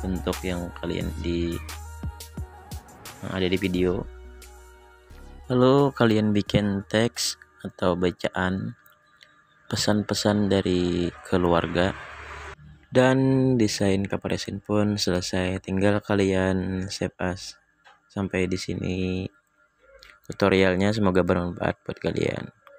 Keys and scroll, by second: 3.3-4.7 typing.